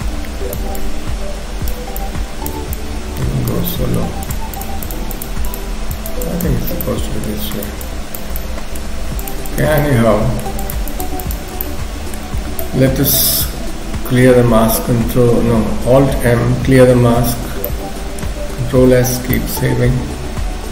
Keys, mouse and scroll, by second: 0.8 click, 2.0 click, 2.3 shift+click, 2.8 shift+click, 3.7 middle click, 4.2 shift+click, 4.6 shift+click, 6.6 scroll down 1, 6.8 middle click, 7.6 shift+click, 7.8 shift+click, 8.4 middle click, 9.2 shift+click, 9.5 shift+click, 9.8 middle click, 10.6 shift+click, 10.9 shift+click, 11.6 middle click, 12.4-14.4 scroll down 2, 12.6 middle click, 17.0 alt+m, 17.4 scroll down 2, 17.6 middle click, 18.9 ctrl+s, 19.4 middle click.